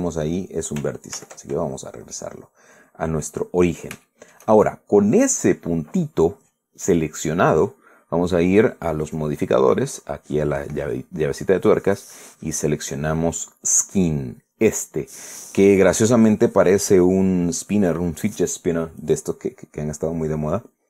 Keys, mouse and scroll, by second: 0.3 scroll down 1, 1.9 ctrl+z, 2.4 ctrl+scroll down 2, 2.8-4.1 middle drag, 4.7 shift+middle click, 5.3 shift+scroll up 2, 9.7 click, 12.4 click.